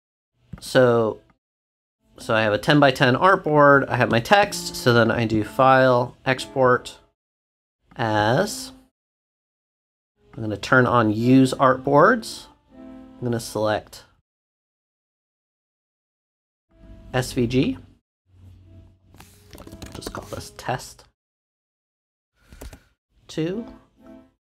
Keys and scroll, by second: 19.2-20.5 typing, 22.6 2.